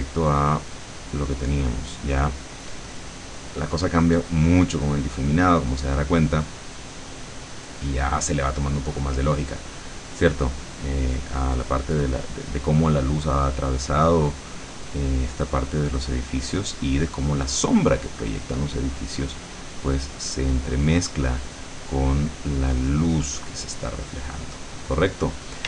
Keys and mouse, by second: 0.8 click, 2.3-13.0 drag, 13.5-21.9 drag, 22.1 click, 22.7-24.9 drag.